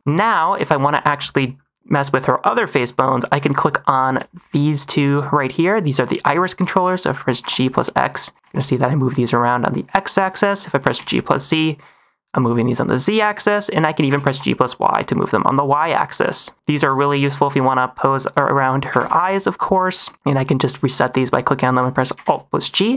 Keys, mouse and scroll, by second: 0.9 shift+middle click, 2.4 middle click, 3.3 click, 4.2 shift+middle click, 4.8 shift+click, 7.1-8.4 typing, 10.7 g, 10.9 z, 13.6 right click, 14.0 g, 14.2 y, 16.5 x, 17.6 middle click, 17.9-20.1 typing, 18.1 click, 18.5 click, 19.8 middle click, 20.1 middle click, 20.8 shift+click, 22.1 alt+g, 22.8 middle click.